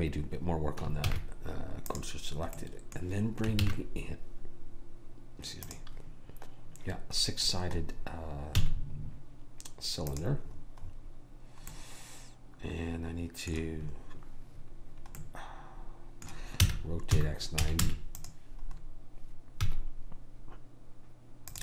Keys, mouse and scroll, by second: 2.0 shift+s, 3.6 shift+a, 7.4-10.0 middle drag, 8.6 s, 16.7 r, 19.8 s.